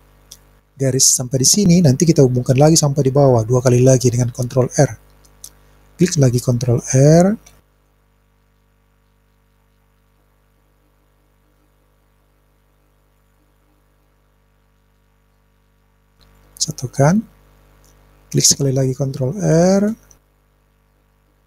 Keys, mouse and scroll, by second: 0.0 click, 7.5 ctrl+r, 19.6 ctrl+r.